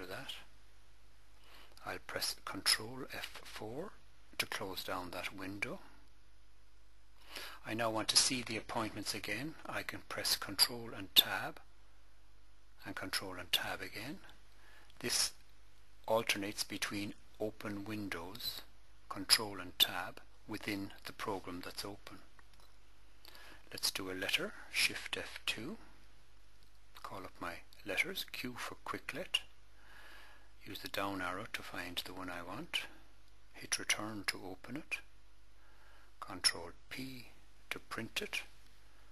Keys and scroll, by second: 3.8 ctrl+F4, 10.9 ctrl+Tab, 13.1 ctrl+Tab, 15.4 ctrl+Tab, 18.4 ctrl+Tab, 25.4 shift+F2, 28.4 q, 31.3 Down, 33.9 Return, 36.7 ctrl+p.